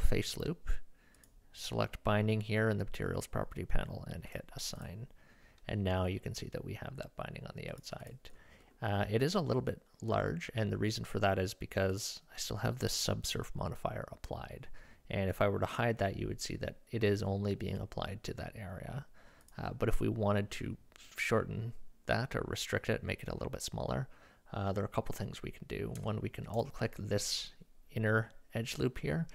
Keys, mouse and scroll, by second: 4.3-5.3 drag, 7.7 click, 8.0 click, 8.6 middle click, 11.9-12.8 drag, 15.7-17.8 drag, 19.4-26.0 drag, 26.5 alt+click, 26.9-28.0 drag.